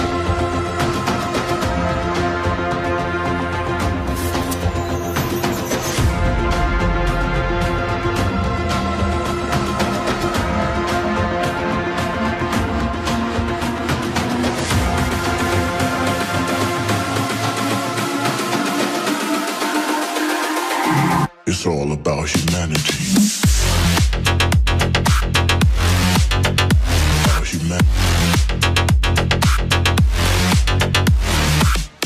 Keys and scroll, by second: 15.9 Return, 16.5 Return.